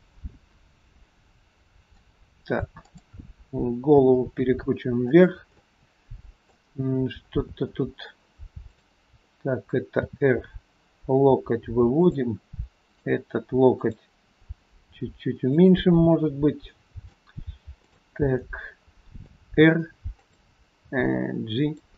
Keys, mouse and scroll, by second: 0.8 scroll down 1, 1.0 middle click, 2.8 click, 3.9 r, 5.6 middle click, 6.9-7.4 scroll up 3, 7.4 scroll down 2, 7.8 middle click, 8.7 click, 10.1 r, 12.9 click, 13.9 click, 14.9 r, 16.7 scroll up 1, 16.9 middle click, 17.9 click, 18.5 middle click, 19.5 r, 20.9 g.